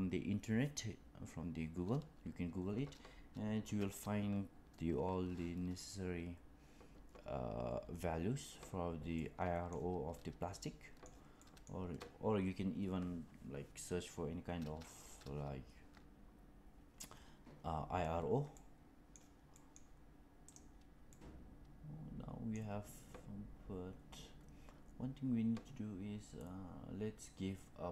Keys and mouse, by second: 9.0-9.6 middle drag, 10.5-11.0 middle drag, 11.3 middle drag, 18.4-19.1 middle drag, 19.4 middle click, 21.0-22.5 middle drag.